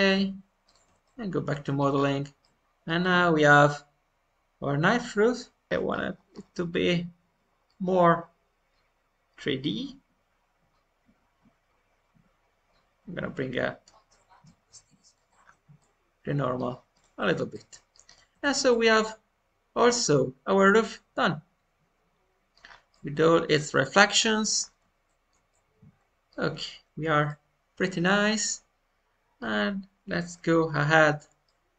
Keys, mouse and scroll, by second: 0.0 click, 0.8 Tab, 1.0 middle click, 1.9-2.3 scroll up 2, 2.3 middle click, 3.0-3.5 scroll up 2, 4.0-5.5 middle drag, 15.4-15.7 scroll down 1, 15.7-16.9 middle drag, 16.9 click, 17.2 Tab, 17.5 middle click, 18.0 click, 18.3 Tab, 18.5 click, 18.8-24.5 middle drag, 22.8-23.6 scroll down 1, 24.5 scroll up 2, 25.0-30.4 shift+middle drag, 31.4 middle click.